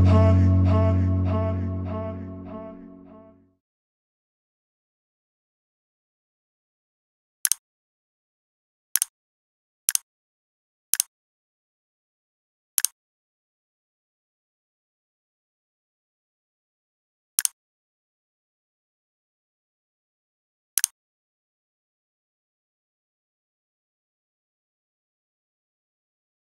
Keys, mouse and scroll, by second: 0.9 x, 1.6 click, 3.4 click.